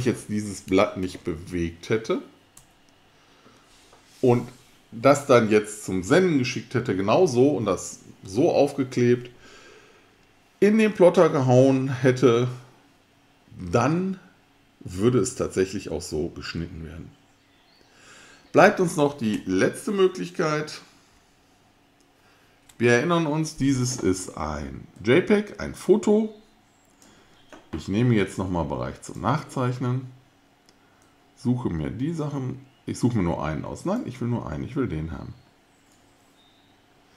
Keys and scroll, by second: 1.0 super+z, 2.6 super+z, 20.0 super+z, 21.1 super+z.